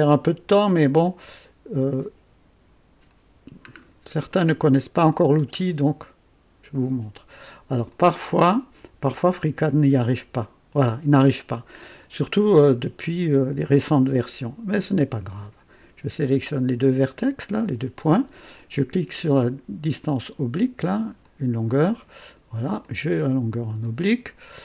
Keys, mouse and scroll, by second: 0.8 click, 1.9-3.2 drag, 3.7 scroll up 1, 4.3-5.0 right drag, 5.3 scroll down 2, 7.5 click, 10.0 click, 12.0 click, 14.7 click, 17.2 ctrl+click, 21.2 click, 22.8-23.9 drag.